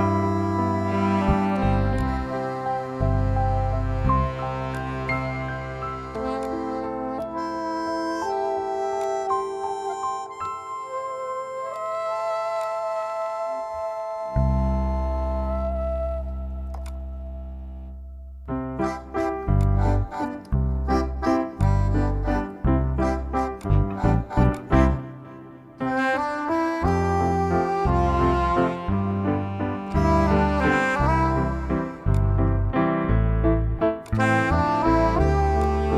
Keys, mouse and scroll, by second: 1.8-8.8 drag, 12.4 click, 16.7 click, 19.3 click, 25.8-26.6 scroll down 1, 26.6-29.7 scroll up 1, 29.7 scroll, 29.8-31.6 scroll down 1, 31.9 click.